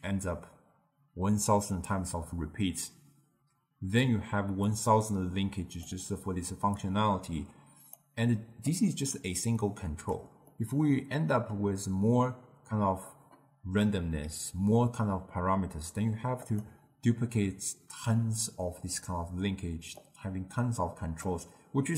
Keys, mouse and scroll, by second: 4.7-10.4 drag, 10.4-13.5 middle drag, 16.4 click, 20.0-21.9 drag.